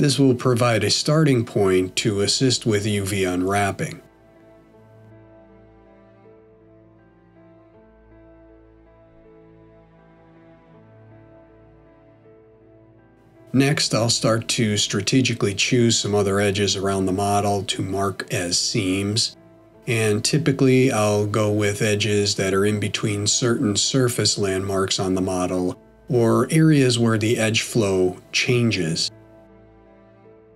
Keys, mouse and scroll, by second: 5.3 middle click, 8.2 ctrl+shift+middle click, 11.9 ctrl+shift+click, 14.4 alt+shift+click, 20.3 middle click, 22.4 alt+shift+click, 28.1 right click.